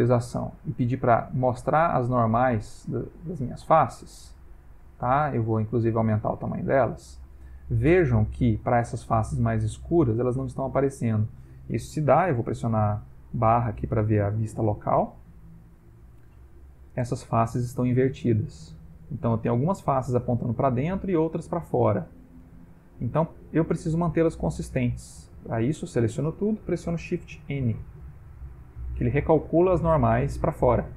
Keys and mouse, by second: 4.6 click, 7.3 middle click, 9.7 middle click, 13.0 /, 15.4 middle click, 17.1 ctrl+middle click, 17.6 middle click, 20.6 middle click, 21.1 middle click, 22.7 ctrl+middle click, 23.1 ctrl+middle click, 23.1 middle click, 25.3 a, 27.2 shift+n, 30.0 middle click.